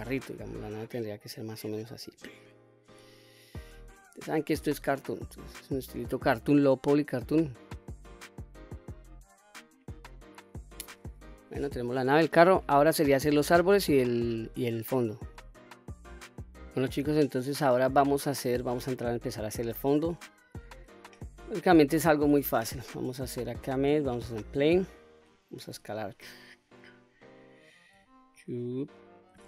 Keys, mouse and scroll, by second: 1.0 click, 2.6 s, 3.7 click, 4.1-5.2 middle drag, 5.5-5.9 scroll down 1, 5.9-9.2 middle drag, 16.6-17.1 middle drag, 17.3-17.8 scroll down 1, 17.8-18.2 middle drag, 18.6-19.0 scroll down 2, 19.1-19.5 middle drag, 19.7-21.5 scroll up 1, 21.5-21.9 scroll up 1, 21.9 shift+a, 25.5 s, 26.5 click, 26.9-27.7 scroll down 2, 27.7 s, 28.4 click.